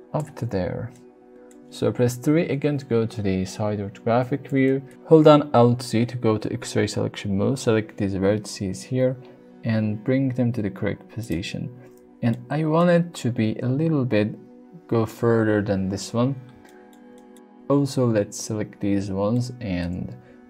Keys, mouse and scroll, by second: 0.9-1.5 middle drag, 2.2 KP_3, 4.2 Tab, 4.6 shift+middle click, 8.9 g, 11.2 click, 12.3 shift+middle click, 16.6 shift+middle click, 17.1 shift+middle click, 17.9 click, 19.4 shift+middle click, 20.3 g.